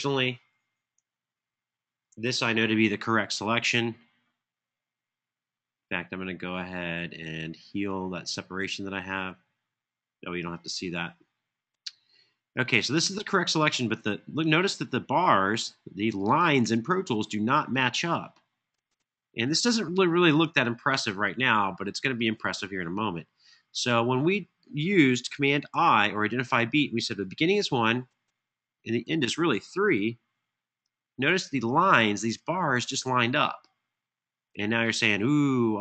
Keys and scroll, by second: 1.0 Home, 25.4 super+i, 27.2 1, 28.4 Tab, 28.6 Tab, 28.8 Tab, 30.2 3, 30.6 Return.